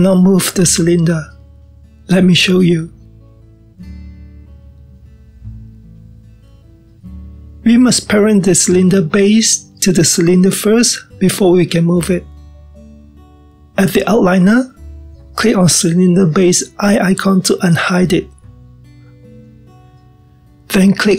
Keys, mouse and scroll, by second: 0.3-1.4 middle drag, 1.4-2.7 scroll down 1, 2.7 g, 18.4 click.